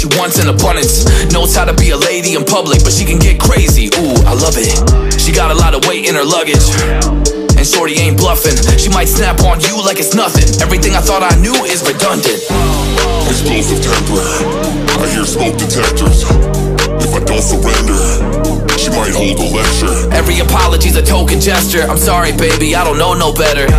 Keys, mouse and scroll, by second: 3.9 alt+scroll down 1, 4.2 alt+scroll up 1, 15.7 double click, 17.2 Delete, 19.4 double click, 21.9 double click.